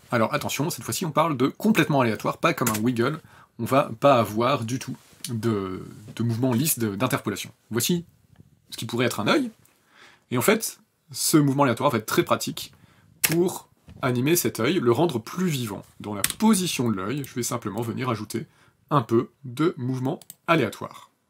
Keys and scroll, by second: 2.4 KP_0, 13.0 space, 16.0 p.